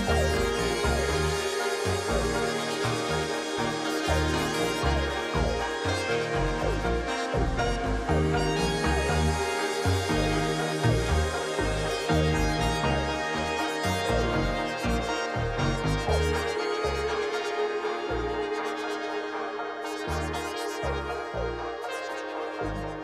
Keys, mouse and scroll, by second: 0.9 ctrl+d, 1.7 ctrl+t, 4.7 ctrl+t, 6.6 alt+click, 14.8 double click, 20.5-21.4 scroll down 8.